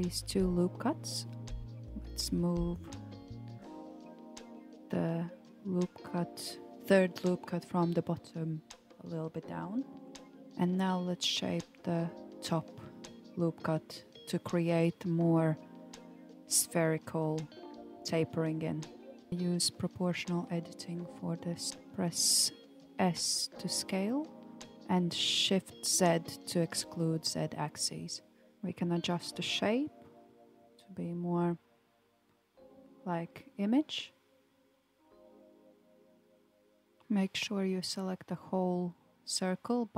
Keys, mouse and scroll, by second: 1.4 alt+z, 2.5 click, 2.9 alt+click, 4.8 g, 8.9 alt+click, 10.5-13.7 drag, 14.3 s, 28.2 alt+click, 30.8 g, 36.4 Tab, 37.0 click, 38.5 g.